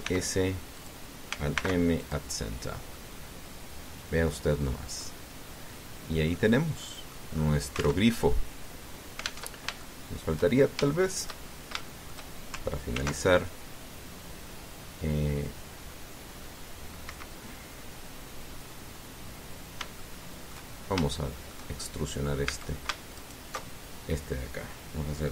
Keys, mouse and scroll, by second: 0.7 e, 0.8 s, 1.6 click, 2.3 alt+m, 2.8 alt+click, 3.3-3.7 alt+scroll down 1, 3.7-5.2 drag, 5.3 scroll down 1, 5.8-7.3 drag, 7.3 scroll down 1, 7.5 click, 8.8 alt+Tab, 10.3 alt+Tab, 10.6 alt+shift+middle click, 11.3 shift+scroll up 2, 11.6-13.1 shift+middle drag, 13.7 ctrl+r, 17.9 Escape, 20.8 shift+middle click, 21.6 shift+scroll up 1, 21.9 shift+middle click, 22.0 shift+right click, 23.2 a, 24.0 alt+shift+right click.